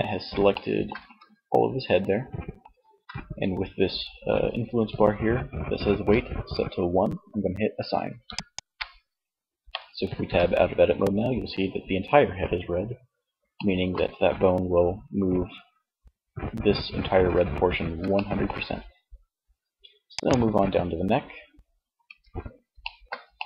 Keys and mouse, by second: 1.7 z, 7.5-9.1 drag, 9.4 Tab, 17.4 middle click, 21.1 Tab.